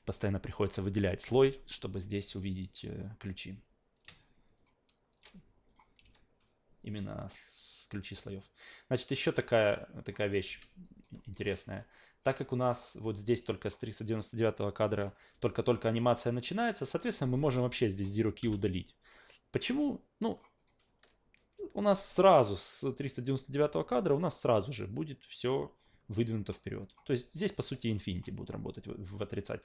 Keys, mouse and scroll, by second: 2.2 a, 4.6 shift+click, 5.7 click, 6.0 a, 7.3-9.2 drag, 9.5 alt+right click, 9.8 alt+click, 10.2 alt+right click, 10.5 f, 10.8 alt+right click, 11.2 alt+right click, 11.5 alt+middle drag, 11.8-12.2 alt+drag, 12.4 alt+middle click, 13.5 click, 15.5 alt+drag, 15.9 alt+middle click, 16.2-16.8 alt+drag, 17.5 click, 18.4 Delete, 19.8-20.4 alt+drag, 20.6 alt+right click, 21.6-22.3 drag, 26.5-26.9 drag, 27.4 alt+middle click.